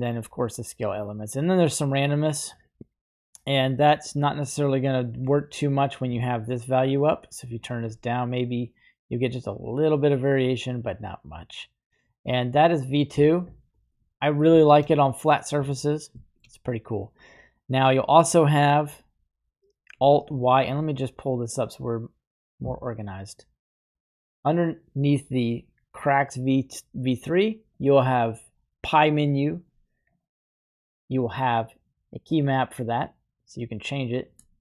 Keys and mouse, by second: 1.4-5.3 drag, 6.2-7.7 shift+drag, 8.3-10.5 drag, 11.0-13.4 drag, 14.0 middle click, 14.6 shift+middle click, 16.2 shift+middle click, 21.5-22.8 drag.